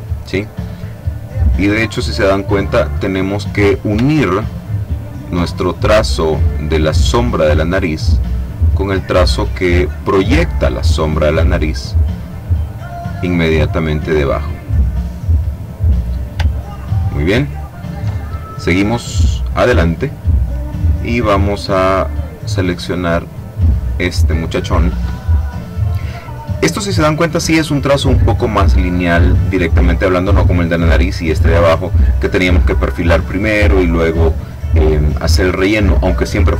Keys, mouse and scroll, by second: 1.5 click, 2.7 click, 4.1-4.7 ctrl+scroll up 2, 4.9-5.4 ctrl+scroll up 2, 6.3-8.3 drag, 9.1-10.4 drag, 10.8-13.2 drag, 13.7-15.3 drag, 16.7-17.3 ctrl+scroll down 2, 17.5-18.5 ctrl+drag, 22.4 click, 23.8 click.